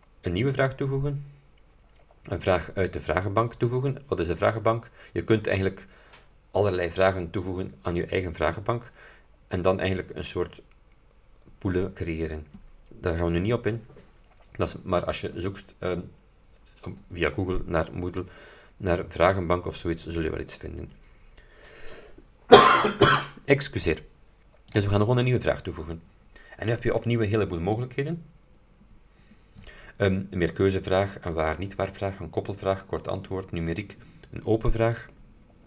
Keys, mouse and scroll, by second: 24.8 click, 27.6-28.2 scroll down 2, 28.7-29.2 scroll up 2, 29.3-29.7 scroll up 2, 35.0 click.